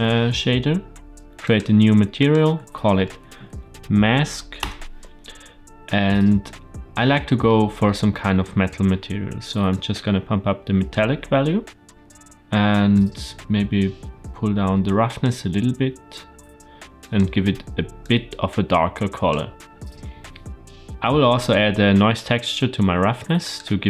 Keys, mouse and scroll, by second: 1.4 click, 2.1-5.0 drag, 5.1 click, 6.0-7.0 middle drag, 7.4 middle click, 8.8-9.6 scroll up 1, 9.6-10.9 drag, 9.6 scroll up 2, 11.8 scroll up 2, 12.9-15.2 drag, 16.9 click, 22.9 shift+a.